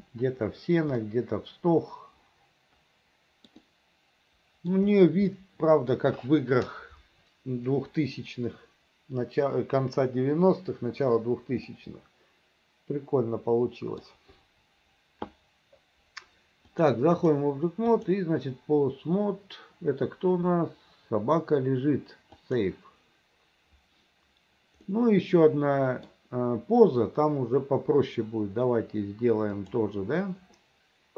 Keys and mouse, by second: 1.1 middle click, 1.7 click, 1.7 middle click, 2.5 click, 3.3 click, 3.7-4.8 drag, 5.4 click, 11.8-14.1 middle drag, 16.7 click, 18.1-22.7 drag, 25.0-26.2 middle drag, 29.7 click.